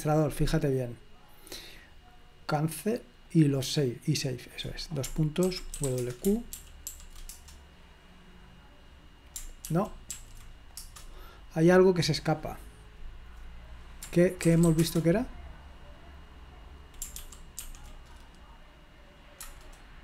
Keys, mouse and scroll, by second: 1.7 click, 3.4 click, 4.3 click, 5.6-6.4 typing, 6.6 ctrl+p, 6.9 ctrl+p, 7.3 Return, 9.6 ctrl+p, 10.1 ctrl+p, 10.8 Return, 14.5-15.2 typing, 17.1 ctrl+p, 17.6 ctrl+p, 19.4 Return.